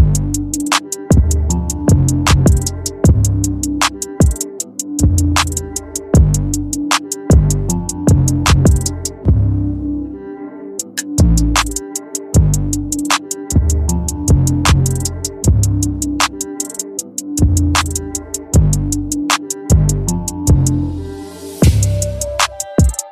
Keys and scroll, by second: 8.6 ctrl+j, 11.8 ctrl+t, 19.4 Return.